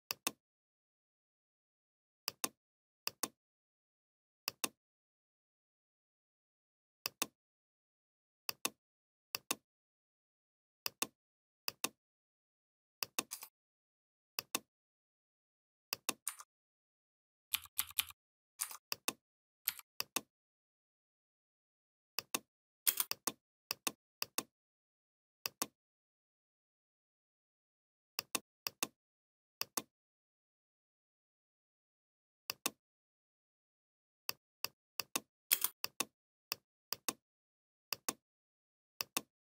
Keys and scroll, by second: 17.4 l, 22.7 space, 35.3 space.